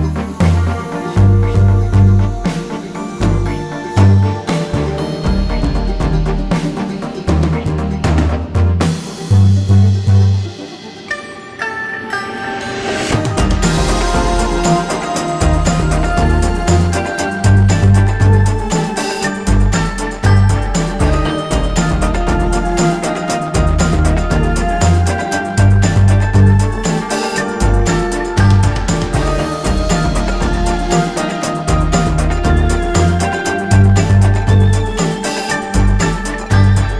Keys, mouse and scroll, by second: 2.0 space, 2.8-5.5 drag, 6.5-9.2 drag, 11.6 ctrl+z, 14.0 alt+scroll up 1, 15.5 click, 23.1-27.2 drag, 28.2 ctrl+z, 29.2 click, 36.1-36.9 drag.